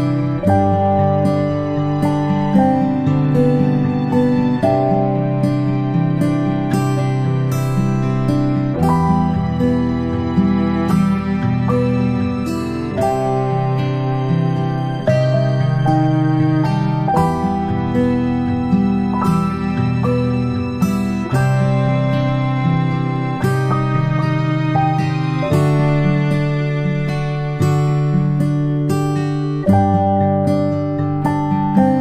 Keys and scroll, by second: 12.1 ctrl+super+z, 14.2 ctrl+super+z, 24.6 ctrl+z, 28.9 Delete.